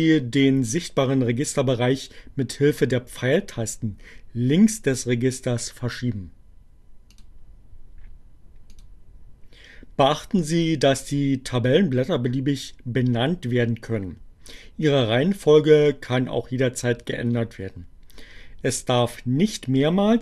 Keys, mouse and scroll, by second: 5.5-7.5 drag, 7.9-8.9 drag.